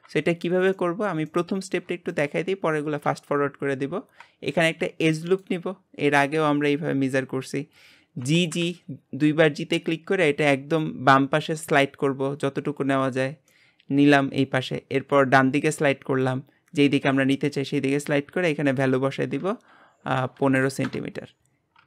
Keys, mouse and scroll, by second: 0.7-2.1 middle drag, 2.1 click, 3.1 Tab, 4.0-4.6 scroll down 1, 4.6 ctrl+r, 8.2 g, 13.5 shift+middle click, 14.4-15.4 scroll up 1, 15.4 click, 18.7-21.7 drag.